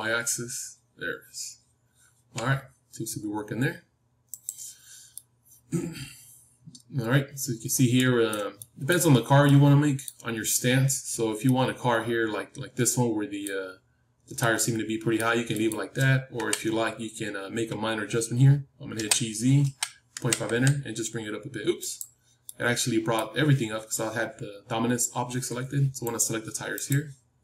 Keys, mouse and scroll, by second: 5.1-13.7 middle drag, 14.3-18.9 middle drag, 16.3 KP_3, 18.9 g, 22.4-25.6 middle drag, 26.2-27.4 drag.